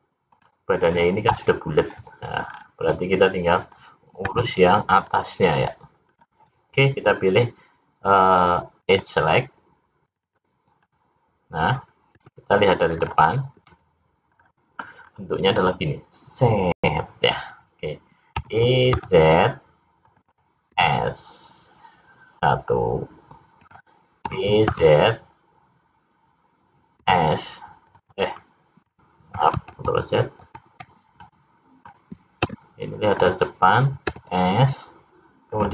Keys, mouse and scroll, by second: 2.5-2.8 scroll up 3, 2.9 middle click, 4.2 `, 6.1-6.6 scroll up 3, 8.9 click, 10.0 click, 10.2 click, 10.8 middle click, 12.2 `, 14.4 scroll down 2, 15.0-16.8 scroll down 2, 18.4 e, 20.6 s, 24.2 e, 28.3 middle click, 29.7 ctrl+z, 30.4 ctrl+z, 31.2 middle click, 32.4 `, 34.0 s.